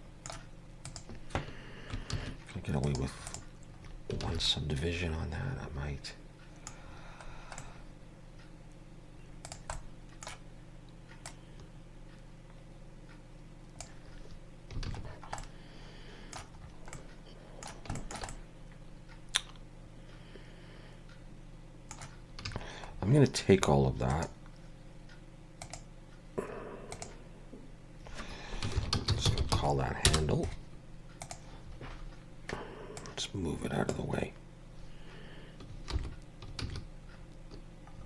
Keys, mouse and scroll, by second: 0.9 click, 2.1 ctrl+1, 2.8 right click, 3.8-4.1 scroll up 3, 4.2 alt+a, 4.4 middle click, 6.8-7.5 scroll down 6, 7.6 middle click, 9.4 click, 9.7 middle click, 11.2 click, 14.9 alt+a, 15.0-15.4 scroll down 5, 15.4 middle click, 16.6 scroll up 4, 16.9 middle click, 17.9 shift+middle click, 18.3 middle click, 22.4 a, 22.9-24.1 scroll down 4, 24.1 right click, 31.9-32.9 scroll down 2, 32.9 click, 36.0 alt+h, 36.6 alt+a, 37.2-37.9 scroll up 3, 37.9 scroll down 4.